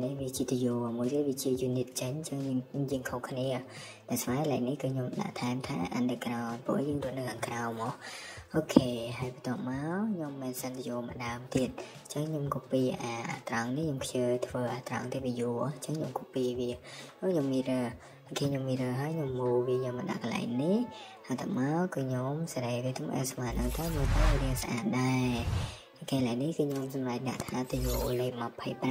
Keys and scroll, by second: 1.6 Escape, 4.0 space, 6.1 typing, 8.9 Escape, 9.0 Escape, 12.3-13.9 typing, 16.2 Escape, 17.5 typing, 20.5 Escape, 23.7 Escape, 25.9 typing, 27.0-28.1 typing.